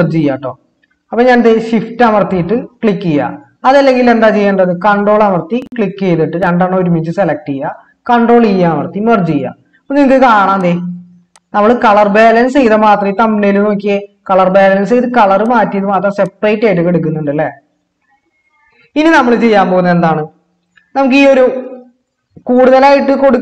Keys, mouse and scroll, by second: 8.4 ctrl+e.